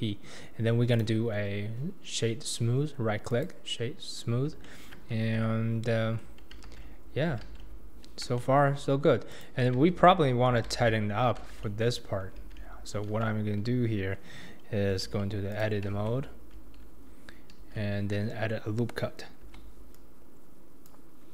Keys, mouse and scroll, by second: 0.0 click, 0.9-4.0 right drag, 4.0-4.6 scroll up 4, 4.6-5.1 shift+middle drag, 5.1 scroll down 2, 5.3 Tab, 6.0 Tab, 6.6 alt+z, 7.2 scroll down 1, 7.4 alt+z, 8.4-8.8 shift+middle drag, 8.8-9.3 scroll up 2, 9.3 click, 9.7 Tab, 10.6 alt+z, 11.5 alt+z, 12.4 alt+z, 13.1 alt+z, 14.9 Tab, 15.5 click, 15.9 Tab, 17.6 alt+z, 19.4 ctrl+r.